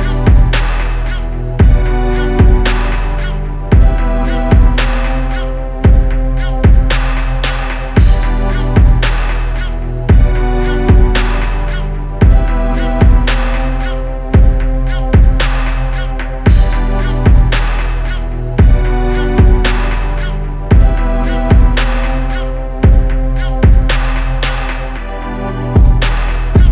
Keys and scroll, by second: 3.6 ctrl+z, 5.1 ctrl+z, 7.9 ctrl+z.